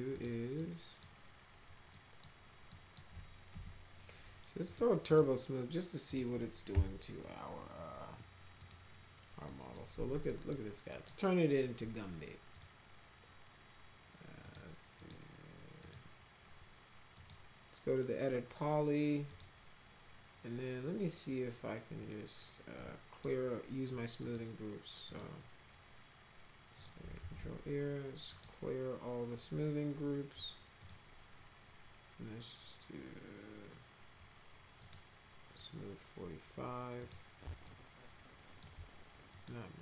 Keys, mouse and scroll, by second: 0.1 click, 0.5 middle click, 1.9 right click, 2.6 right click, 3.5 F4, 4.6 click, 5.0 click, 6.0 click, 6.7 t, 8.5 click, 9.4 middle click, 10.2 middle drag, 10.8 middle click, 12.5 click, 14.4 click, 14.9 click, 15.8 click, 16.5-17.1 scroll up 2, 17.1 click, 19.2 click, 22.7 click, 24.1 click, 25.0 click, 26.7 click, 27.1 ctrl+a, 28.2 click, 30.8 click, 34.7 click, 36.9 click, 37.6 alt+middle click, 39.2 click.